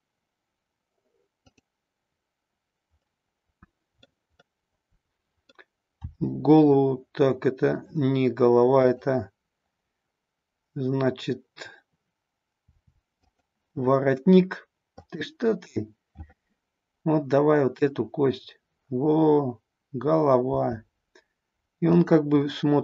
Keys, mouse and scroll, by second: 1.4-4.6 drag, 4.6-5.5 middle drag, 5.9 r, 8.7-12.0 drag, 12.6 r, 13.2 click, 15.0-18.1 drag, 20.4 r, 22.0 click, 22.4-22.8 middle drag.